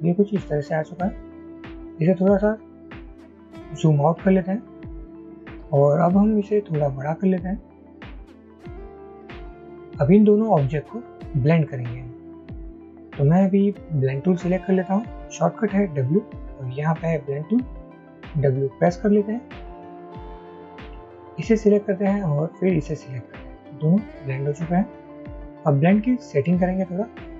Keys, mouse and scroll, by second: 2.6-4.1 alt+scroll down 1, 5.2 alt+shift+click, 18.1 w.